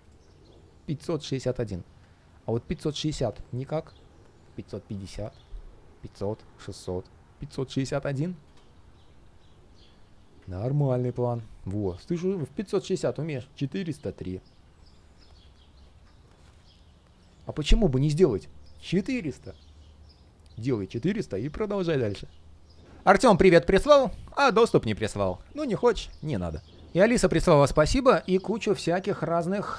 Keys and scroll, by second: 28.9 ctrl+shift+3.